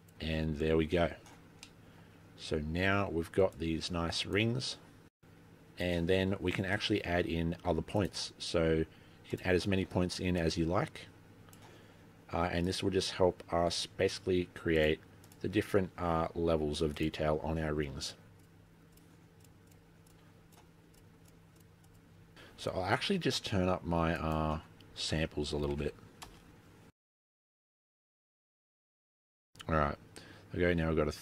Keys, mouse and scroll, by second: 1.5-1.9 scroll down 6, 1.7 middle click, 3.5 click, 4.6 click, 5.5 click, 5.7 click, 6.3 click, 7.4-8.0 scroll up 2, 8.2 click, 9.4 click, 12.8 click, 14.9 click, 15.8 click, 17.0 click, 19.4 click, 19.7 click, 20.6 click, 21.0 click, 21.3 click, 23.7 click, 25.0 scroll down 4, 25.2 scroll up 1, 25.3-25.8 scroll down 1, 25.8 click, 26.4 click, 27.9 click.